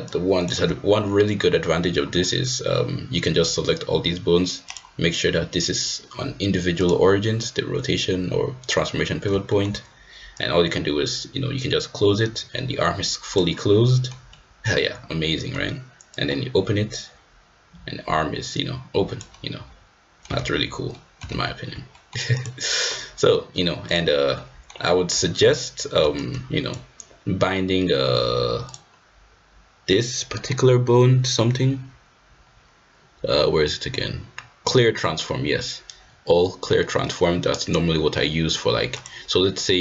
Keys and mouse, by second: 0.1-0.5 shift+drag, 4.7-6.9 drag, 9.5 shift+middle click, 10.3-13.4 drag, 13.5-14.0 middle drag, 14.2 middle drag, 14.5-15.2 drag, 15.2 middle drag, 16.2-19.2 drag, 19.2-20.2 middle drag, 20.5 ctrl+z, 20.9-21.5 ctrl+middle drag, 21.4 ctrl+z, 21.9 middle click, 22.9-23.3 middle drag, 23.8-24.2 drag, 24.3-24.7 middle drag, 26.2-26.7 drag, 28.7-30.4 drag, 30.4-38.0 right drag, 39.0-39.7 right drag, 39.7 middle drag.